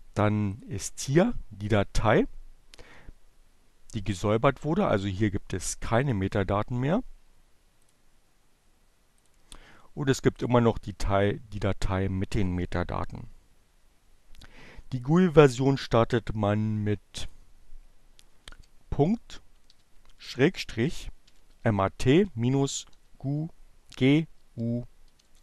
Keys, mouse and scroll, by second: 4.3 right click, 5.3 click, 7.3 click, 8.0 click, 9.8 click, 15.2-17.0 drag, 17.3 ., 17.5 shift+7, 19.7-21.2 typing, 22.2-23.2 typing, 24.7 Return.